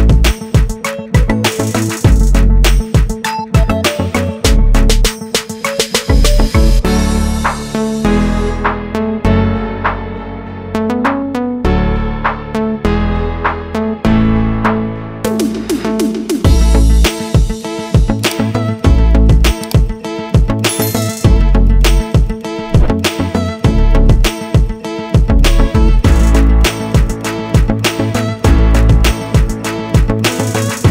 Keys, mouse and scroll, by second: 3.6 click, 4.5 click, 5.3 click, 5.4 double click, 6.6 click, 7.5 click, 9.5 click, 11.6 click, 13.0 click, 14.3 click, 15.6 click, 22.6 click.